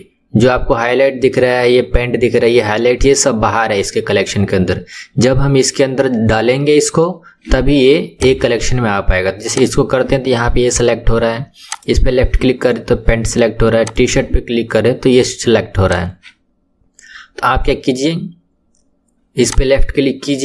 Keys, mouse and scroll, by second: 8.1 click, 9.5 click, 11.6 click, 13.8 click, 15.8 click, 19.4 click.